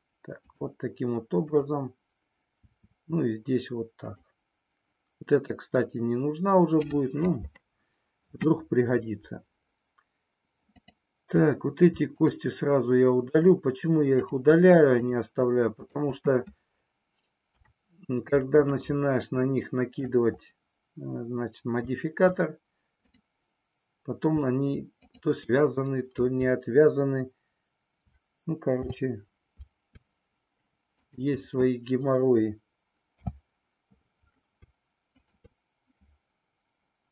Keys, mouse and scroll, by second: 1.4 click, 2.8 e, 4.1 click, 10.8 click, 12.1 shift+click, 14.1 shift+click, 15.0 shift+click, 17.5 Delete, 19.5 middle click, 25.0 shift+click, 28.8 f, 31.0 click, 33.1 f.